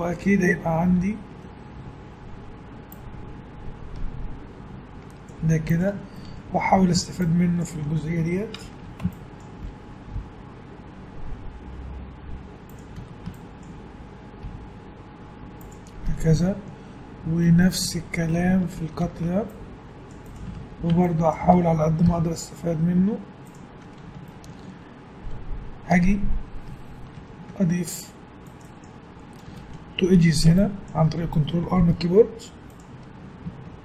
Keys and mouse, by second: 1.0 ctrl+r, 6.2-7.2 middle drag, 7.2-8.6 drag, 8.7 a, 10.2 g, 13.0 a, 13.3-15.3 drag, 14.4 g, 16.7 click, 18.9 ctrl+r, 20.5 a, 22.1 g, 27.1 ctrl+r, 30.2 a, 30.6-32.7 drag, 31.8 g.